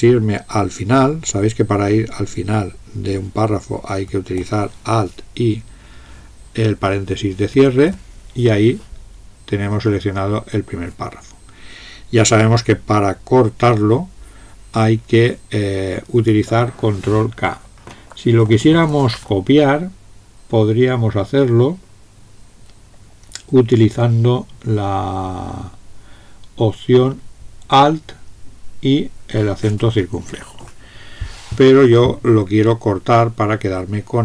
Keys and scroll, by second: 7.5 alt+).